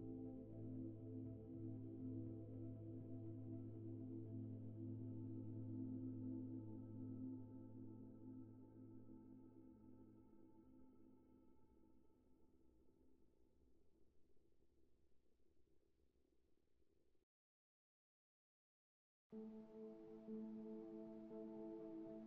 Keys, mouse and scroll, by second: 0.9 middle click, 1.3 click, 2.5 right click, 3.2 ctrl+right click, 4.6-8.3 drag, 9.0 ctrl+right click, 10.3-15.1 drag, 15.4-19.5 right drag, 20.2 click, 21.5 2, 22.0 click.